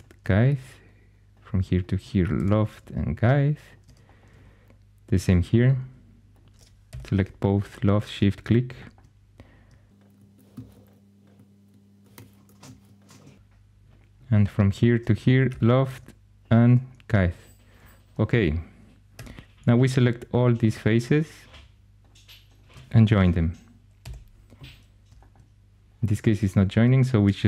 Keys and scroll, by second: 2.2 i, 6.8 i, 10.5 i, 12.1 Escape, 12.6 i, 15.4 |, 19.0 4, 23.9 j.